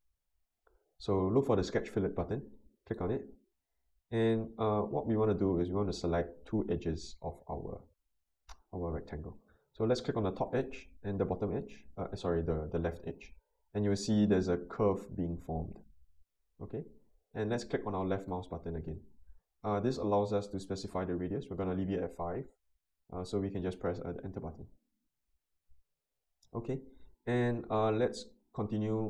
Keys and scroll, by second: 24.5 Return.